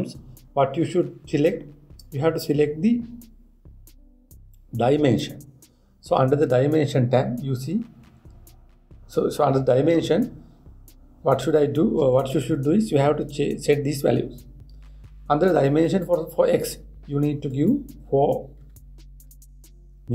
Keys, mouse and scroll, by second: 16.6-19.6 drag.